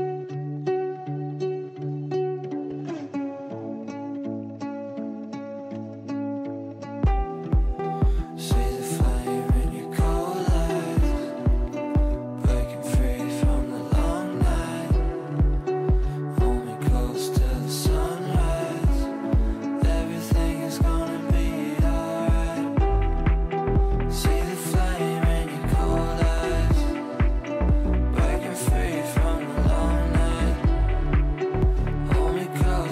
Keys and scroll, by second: 7.2 v, 8.9 ctrl+q.